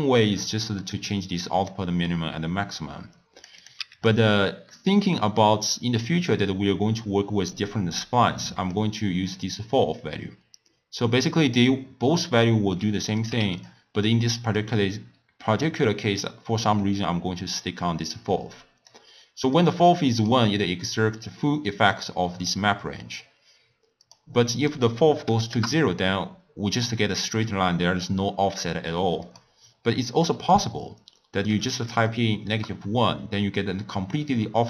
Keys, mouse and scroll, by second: 0.4-3.4 drag, 3.6 click, 4.6-7.7 middle drag, 8.7-11.7 drag, 12.4-13.6 drag, 14.6-17.6 drag, 19.5-22.6 drag, 23.9-27.0 drag, 29.2-32.3 drag.